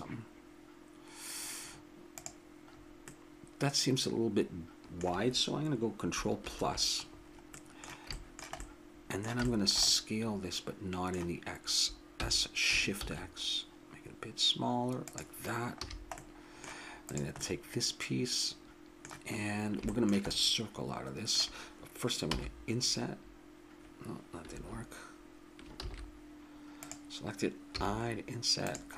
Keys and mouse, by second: 2.7 middle click, 2.8-4.7 middle drag, 6.4 ctrl+KP_Add, 8.4-10.2 middle drag, 10.4 middle click, 10.6 middle click, 10.8 middle click, 12.2 s, 15.8 a, 15.9-17.1 middle drag, 17.1-18.8 drag, 19.9 middle click, 22.2 i, 25.8 ctrl+z, 26.8-28.6 drag, 27.7 i.